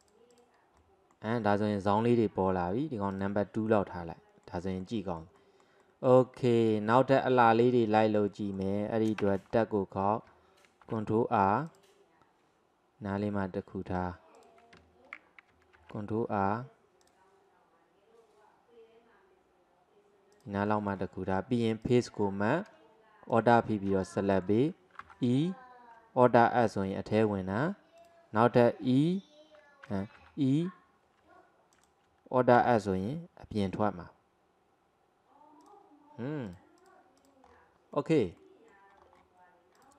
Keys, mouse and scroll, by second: 0.0 click, 0.8-3.2 middle drag, 3.2 click, 3.8-9.2 middle drag, 9.2 Tab, 9.5-10.8 scroll up 1, 10.8 ctrl+r, 15.2-15.8 scroll up 1, 15.8 ctrl+r, 20.7-21.9 middle drag, 21.9 click, 23.3 alt+click, 24.0-25.1 middle drag, 25.1 e, 26.4 alt+s, 30.2 e, 32.6 alt+s, 36.5 click, 37.5-38.0 scroll down 1, 38.0-38.9 middle drag, 38.9 scroll down 1, 39.0 scroll up 2, 39.8 click.